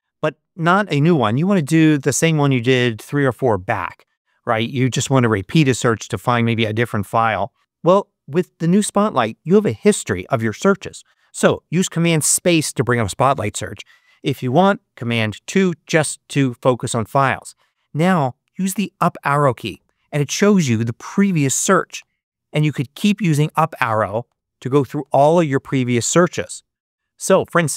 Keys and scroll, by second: 11.9 super+space, 15.2 super+2, 19.6 Up, 21.9 Up.